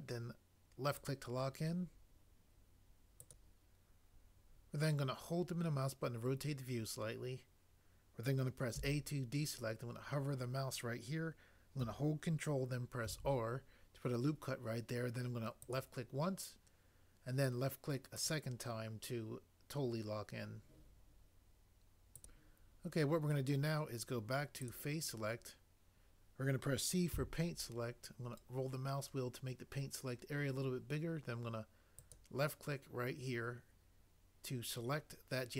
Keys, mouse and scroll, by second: 8.7 a, 13.1 ctrl+r, 27.1 c.